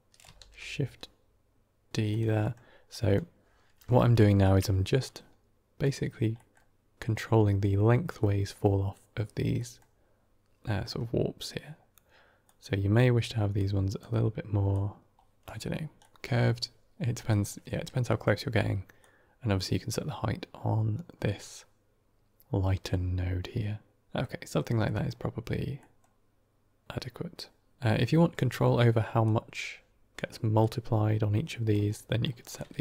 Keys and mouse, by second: 0.3 ctrl+shift+d, 2.3 middle click, 2.8 click, 4.9-5.7 drag, 6.2 middle click, 8.1 middle click, 9.4 middle click, 10.6 middle click, 12.4 click, 13.4-13.9 drag, 14.6 click, 15.9 middle click, 17.2 middle click, 17.9 middle click, 18.9-24.1 drag, 24.1-24.5 middle drag, 24.7 middle click, 25.7 middle drag, 29.1 click, 30.5-31.6 drag, 31.9 middle click, 32.3 click, 32.6 shift+s.